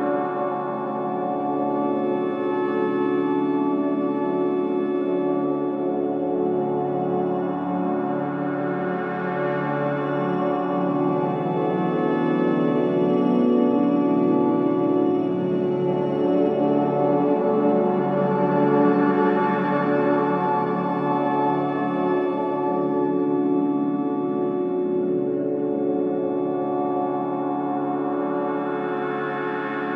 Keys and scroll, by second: 5.1 2, 13.4 4, 16.3 ctrl+z, 22.4 4, 26.0 2, 26.5 ], 28.4 ].